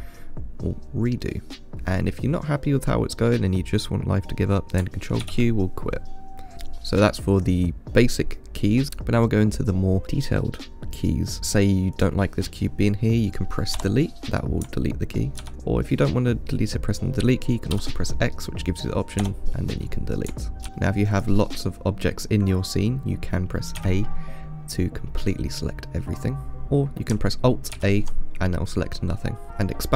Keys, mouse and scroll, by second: 0.9-1.5 scroll down 1, 1.5 middle drag, 1.7 ctrl+z, 5.5 ctrl+q, 15.5 click, 18.0 x, 20.7-21.4 middle drag, 21.4 click, 24.0 a, 28.0 alt+a.